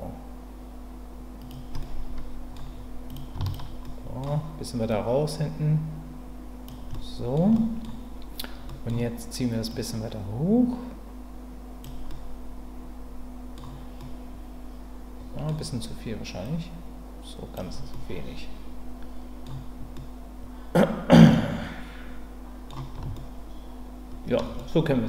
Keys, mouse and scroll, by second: 1.4 click, 1.8 middle click, 3.1 click, 3.4 shift+click, 3.9-4.9 middle drag, 4.9-6.6 drag, 6.9 middle click, 7.5-8.9 middle drag, 9.7-11.8 drag, 12.1-13.6 middle drag, 14.0-15.5 middle drag, 16.4-17.5 drag, 17.9-19.4 middle drag, 19.9-22.7 middle drag, 23.1-24.4 shift+middle drag, 24.6 middle click.